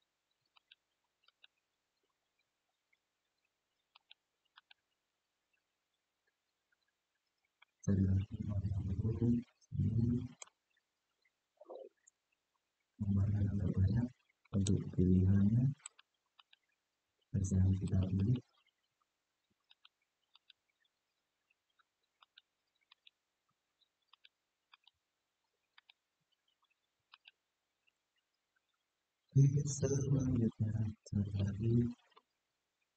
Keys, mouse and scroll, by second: 0.3 alt+shift+click, 1.0 alt+shift+click, 1.6-2.6 scroll up 2, 3.7 alt+shift+click, 4.3 alt+shift+click, 5.0-6.2 scroll down 3, 7.3-10.1 middle drag, 10.8-11.1 scroll up 2, 14.3 alt+shift+click, 15.6 alt+shift+click, 16.1 alt+shift+click, 17.6 alt+shift+click, 17.9 alt+shift+click, 19.4 alt+shift+click, 20.1 alt+shift+click, 22.0 alt+shift+click, 22.6 alt+shift+click, 23.8 alt+shift+click, 24.5 alt+shift+click, 25.5 alt+shift+click, 26.8 alt+shift+click, 28.0-28.8 scroll down 2, 28.8-29.1 scroll down 1, 30.1-31.1 middle drag, 31.9-32.7 middle drag.